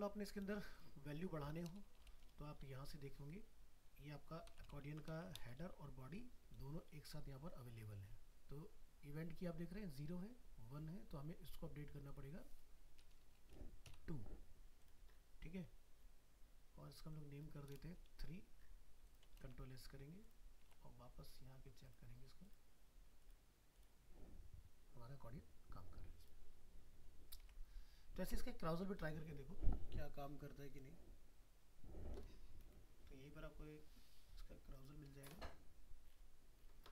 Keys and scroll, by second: 4.8 ctrl+c, 5.6 ctrl+v, 19.4 ctrl+s, 20.7 alt+Tab, 27.4 alt+Tab.